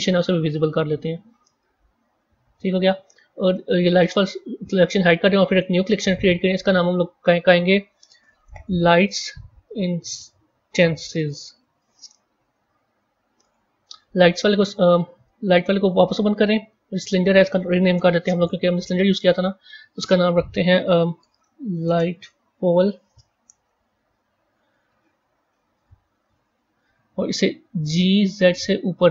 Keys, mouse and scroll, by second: 0.8-3.9 middle drag, 3.9 click, 5.4-6.6 right drag, 6.6 click, 6.8-9.8 drag, 13.3 click, 15.5 click, 16.9 click, 17.1-18.3 drag, 19.1 click, 19.2-22.3 drag, 24.3-24.8 scroll up 1, 24.8 scroll down 1, 25.3 KP_1, 26.1-27.7 scroll up 4, 27.7 g.